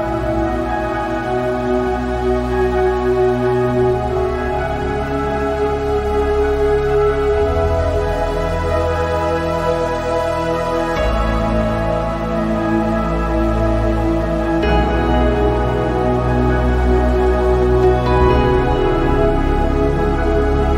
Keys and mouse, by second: 0.5 s, 3.2 click, 4.9 click, 6.4 click, 7.6 click, 8.9 click, 9.8 click, 11.2 click, 14.3-17.3 shift+middle drag, 18.1 shift+middle click, 19.5-20.7 drag.